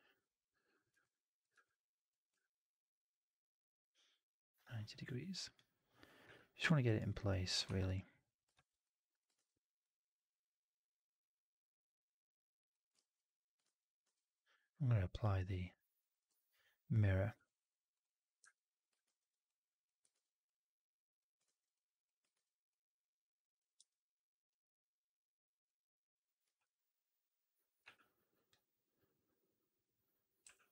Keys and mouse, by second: 2.2-4.4 ctrl+drag, 6.1 w, 7.6 1, 8.4 shift+x, 8.7 click, 9.2 shift+x, 12.1 click, 12.9 ctrl+z, 13.5 shift+x, 13.9 shift+x, 15.6 click, 16.0 click, 16.2 4, 18.9 shift+x, 20.0 shift+x, 23.7 4, 25.2 click, 26.3 r, 30.3 w.